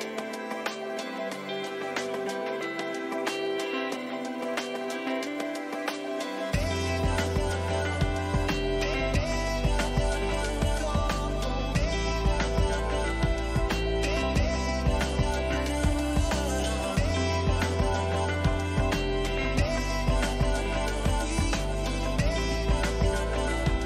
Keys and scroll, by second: 10.2 ctrl++, 10.8 e, 15.9 ctrl+-.